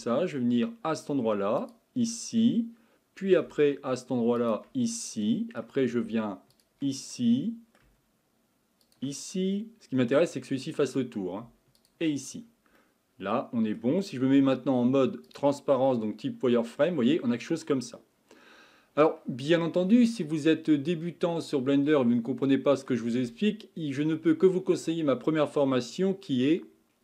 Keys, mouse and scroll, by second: 1.6 ctrl+click, 2.4-4.4 middle drag, 4.4 ctrl+click, 5.0-6.5 middle drag, 6.5 ctrl+click, 7.1-8.8 middle drag, 8.8 ctrl+click, 9.3-11.8 middle drag, 11.8 ctrl+click, 12.4-12.8 scroll down 1, 12.8-14.4 middle drag, 14.4 z, 15.9-18.9 middle drag, 22.5-26.5 middle drag.